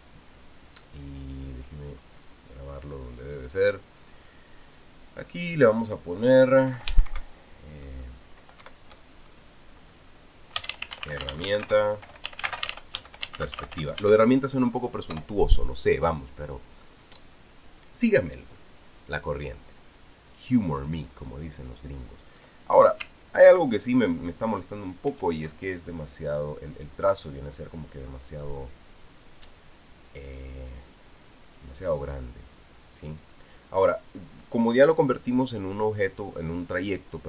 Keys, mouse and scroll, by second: 2.2 click, 2.8 click, 3.9 click, 5.5 click, 6.4 click, 7.5 Home, 7.8 ctrl+shift+Right, 9.2 shift+Left, 9.4 shift+Right, 11.1-15.3 typing, 15.9 Return, 25.9 ctrl+shift+f, 31.6-33.6 drag.